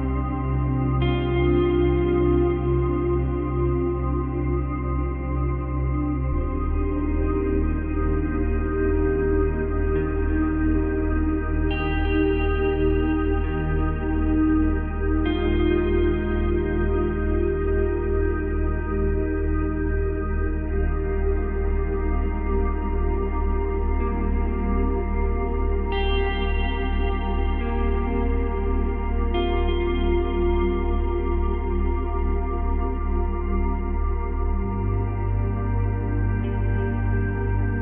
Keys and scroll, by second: 29.0 ctrl+c, 29.2 ctrl+v, 33.4 ctrl+z.